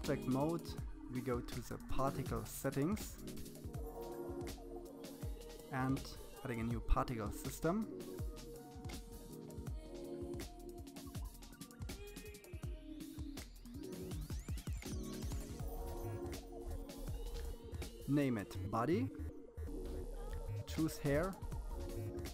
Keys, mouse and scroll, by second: 3.8 click, 4.8-5.6 scroll up 3, 5.6-7.5 drag, 10.4-12.1 drag.